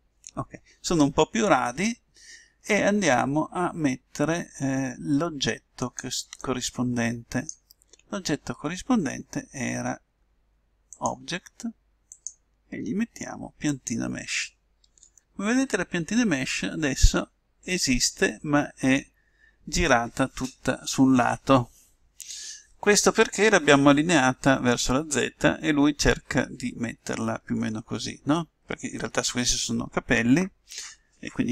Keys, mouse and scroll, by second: 6.4-8.2 drag, 10.9-14.0 drag, 15.2 middle click.